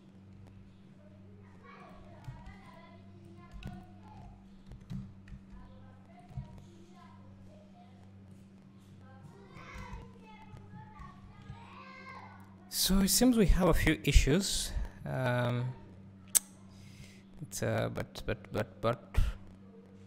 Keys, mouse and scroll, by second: 1.8 click, 4.8 g, 6.4 Tab, 8.6 click, 9.1 scroll down 1, 9.8 alt+a, 10.0 `, 10.8 scroll up 1, 11.5 Tab, 14.4-20.0 drag.